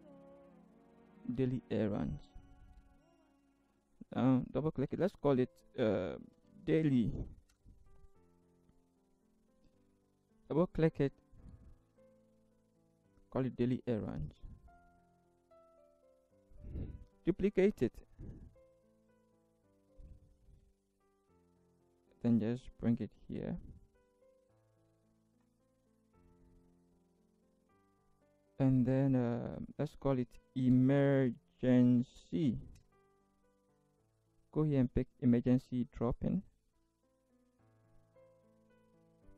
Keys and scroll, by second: 2.7 ctrl+c, 6.3-7.5 typing, 7.5 Return, 12.0 ctrl+v, 17.1 ctrl+j, 17.8 ctrl+shift+Right, 20.5 ctrl+shift+z, 30.5-32.5 typing, 32.8 Return, 38.5 ctrl+c.